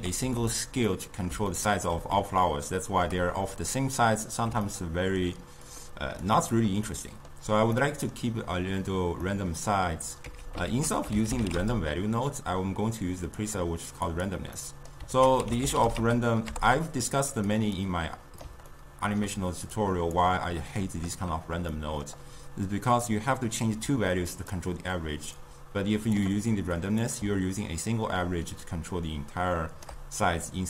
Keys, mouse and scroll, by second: 0.0 g, 0.9-5.7 middle drag, 5.7 drag, 6.9-10.3 middle drag, 10.3 x, 10.8 ctrl+a, 14.7-15.2 middle drag, 15.2 ctrl+a, 17.8 click, 18.8-19.8 ctrl+middle drag, 19.8-21.8 drag, 21.8-23.1 middle drag, 23.1-25.5 drag, 27.1-30.1 drag.